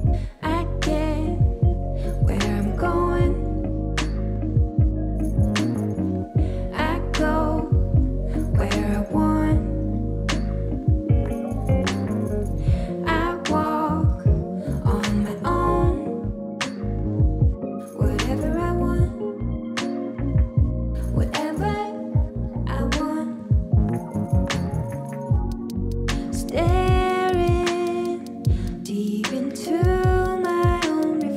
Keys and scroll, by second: 12.6 ctrl+g, 13.5 space.